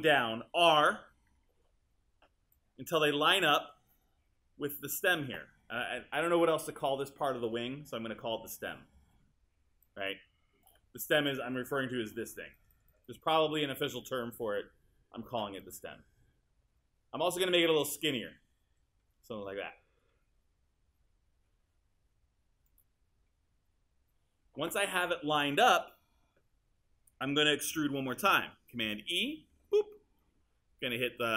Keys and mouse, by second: 1.3 r, 15.6 click, 29.5 super+e.